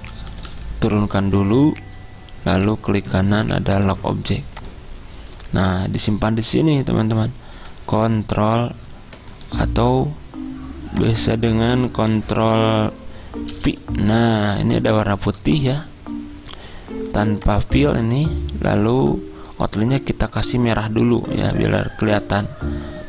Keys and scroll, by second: 0.1 ctrl+Page_Down, 0.2 ctrl+Page_Down, 0.4 ctrl+Page_Down, 13.6 ctrl+v.